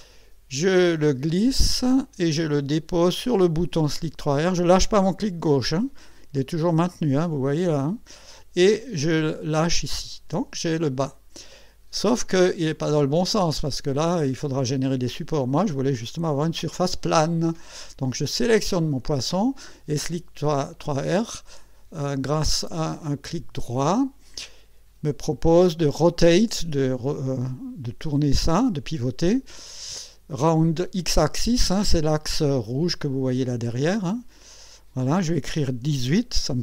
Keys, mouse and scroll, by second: 0.8-9.9 drag, 11.8 scroll up 1, 12.2 scroll down 1, 12.7-14.2 drag, 15.0-15.6 drag, 17.1-17.6 scroll up 3, 18.3 click, 23.8 right click, 34.6 click, 35.8 KP_1, 36.1 KP_8.